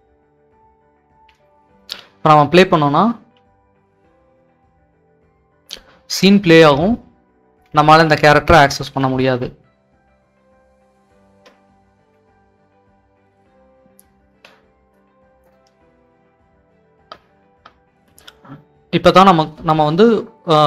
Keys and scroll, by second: 0.0-3.2 typing, 5.5-13.2 typing, 14.3 Escape, 18.1-18.8 typing, 19.8 Escape.